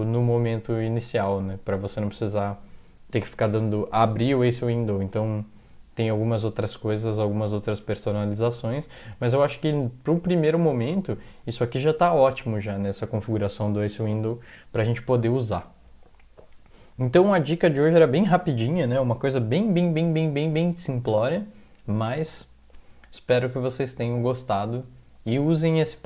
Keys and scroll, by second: 7.8 alt+Tab, 20.0 Down, 20.4 Down, 20.7 Down, 21.0 Down.